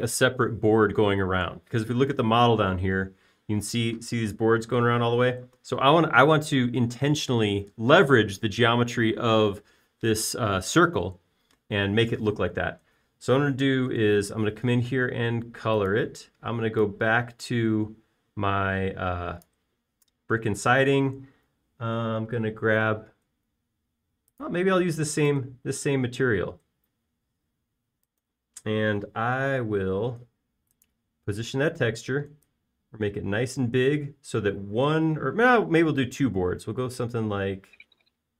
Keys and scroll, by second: 15.4 b.